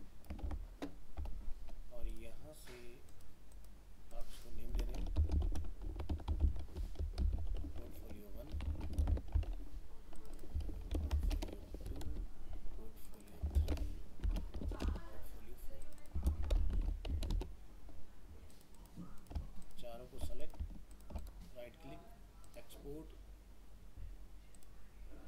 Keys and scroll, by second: 9.0 ctrl+c, 11.0 ctrl+v.